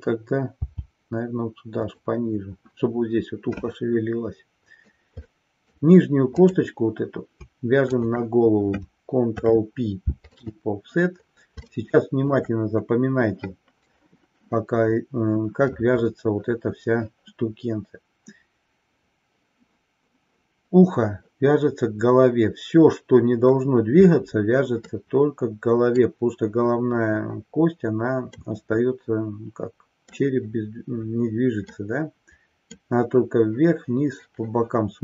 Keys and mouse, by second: 5.3-5.8 middle drag, 6.6-7.0 drag, 9.3 ctrl+p, 11.7-12.4 shift+middle drag, 24.8-26.2 middle drag, 28.4-30.2 middle drag, 31.8-33.0 middle drag.